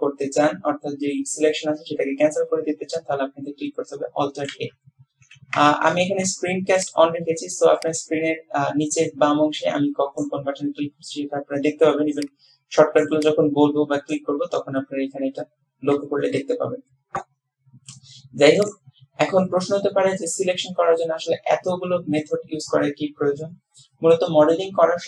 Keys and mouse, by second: 4.6 alt+a, 18.7 click.